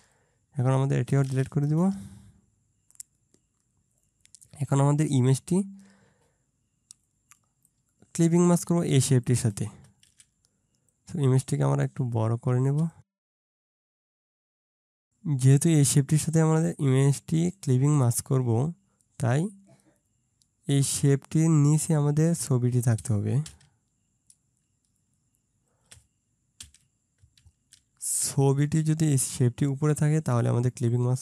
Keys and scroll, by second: 1.7 BackSpace, 10.1 ctrl+z, 14.1-14.5 ctrl+], 23.5 ctrl+], 26.6 ctrl+], 27.4 ctrl+].